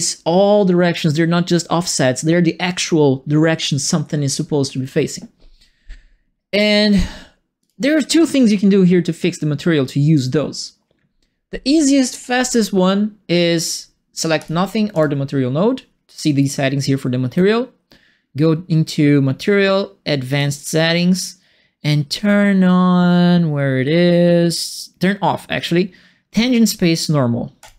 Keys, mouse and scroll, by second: 7.6 click, 14.3 click, 14.9 click, 16.4 right click, 20.3 click, 27.6 click.